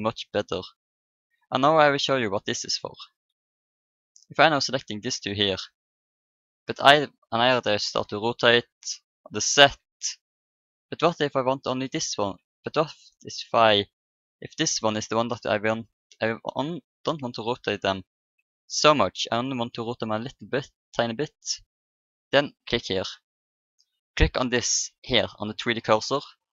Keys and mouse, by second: 0.1 r, 3.4-7.8 middle drag, 4.6 click, 7.8 r, 13.2-15.2 right drag, 15.9-17.7 middle drag, 17.7 r, 21.5-25.3 drag.